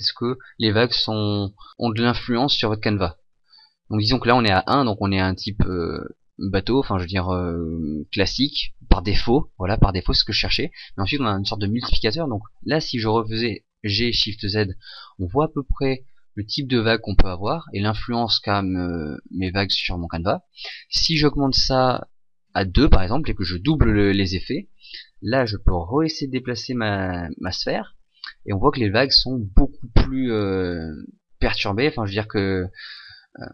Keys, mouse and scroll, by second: 13.1 g, 21.4 click, 25.4 g.